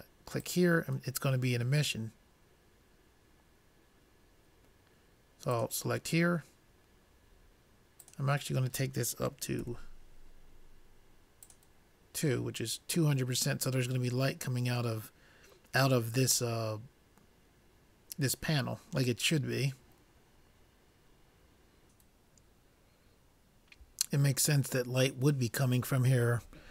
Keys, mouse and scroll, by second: 0.7-2.3 drag, 8.3-10.0 drag.